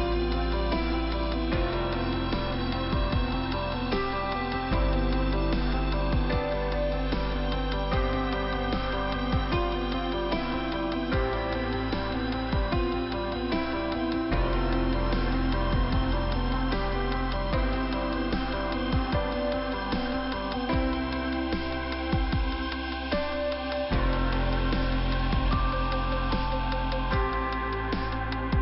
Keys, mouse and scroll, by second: 0.0 double click, 9.7 click, 9.8 click, 10.1 click, 10.2 double click, 11.0 double click, 14.3 f, 17.5 scroll down 2, 23.4 f, 25.4 click, 28.3 click.